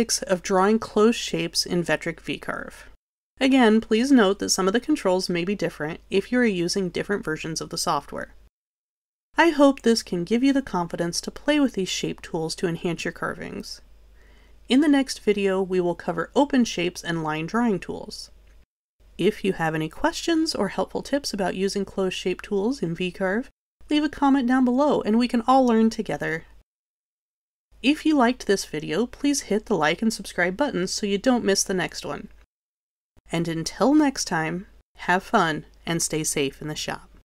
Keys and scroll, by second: 3.5 Delete, 8.3 2.